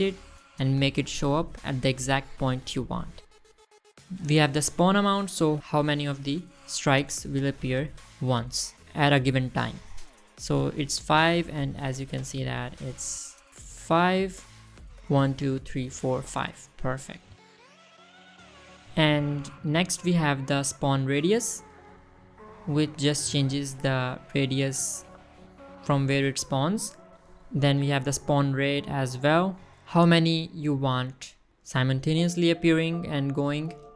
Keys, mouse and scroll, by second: 5.6 click, 5.7 click, 7.2 click, 7.7 space, 8.0 space, 8.5-8.8 middle drag, 12.3-13.5 middle drag, 14.7-15.0 middle drag, 15.2 scroll down 1, 15.3-15.8 middle drag, 17.4-17.7 middle drag, 17.9-18.3 scroll up 1, 18.3 middle drag, 22.1-23.9 drag, 25.3 middle click, 26.0 click, 27.9 click, 29.5-30.6 shift+drag.